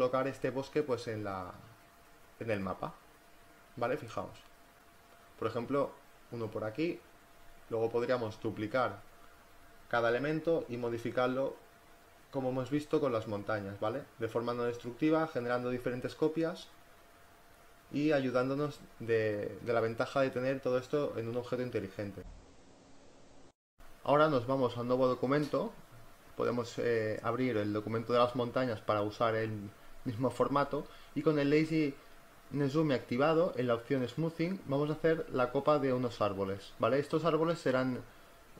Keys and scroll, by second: 3.8 ctrl+t, 5.2 Return, 5.7 Left, 6.6 v, 6.8 Left, 7.0 Down, 7.1 Left, 7.1 Down, 7.5 Left, 7.5 Down, 7.6 Left, 9.1 z, 13.7 space, 29.4 ctrl+z.